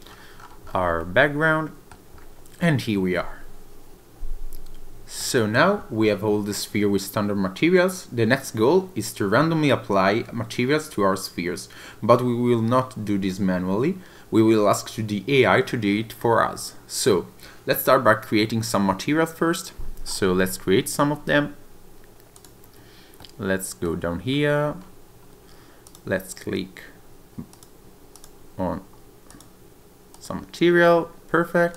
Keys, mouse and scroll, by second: 1.0 middle click, 2.1 scroll up 1, 2.2 scroll down 9, 2.3-2.6 scroll up 1, 5.2 middle click, 20.0-20.4 scroll up 3, 21.1-21.9 scroll down 1, 22.6 click, 23.2 middle click, 24.3-24.7 scroll up 2, 24.7-25.5 scroll down 2, 25.5-25.8 scroll up 1, 25.8 click, 27.5 click, 28.1 click, 29.3 click, 31.7 click.